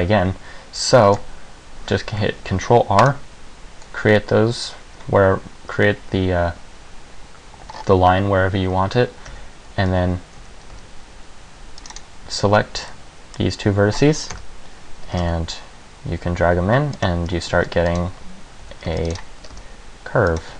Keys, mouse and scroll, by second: 1.2 ctrl+r, 7.9-9.5 scroll up 2, 9.5 scroll up 2, 9.5 a, 10.1 z, 10.5 z, 10.9 c, 12.1 click, 13.1 middle click, 14.5 KP_1, 15.3 g, 17.2 click, 17.4 scroll down 1, 17.7 ctrl+r, 18.8 a, 19.1 c, 19.4 click, 19.5 g, 20.5 click.